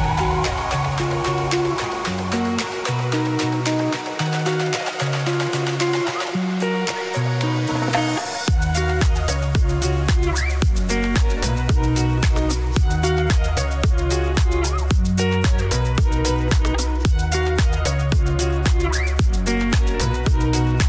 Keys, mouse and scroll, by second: 0.0 s, 0.5 s, 1.5 Tab, 1.7 g, 3.2 KP_1, 3.7 g, 4.9 Tab, 5.2 e, 6.7 KP_7, 8.4 ctrl+r, 9.2 s, 10.0 ctrl+r, 11.4 KP_1, 11.8 s, 13.0 middle click, 13.2 s, 14.1 middle click, 14.5 Tab, 14.7 click, 15.0 click, 15.2 z, 15.7-17.5 middle drag, 19.9 Tab, 20.0 3, 20.2 click, 20.4 g.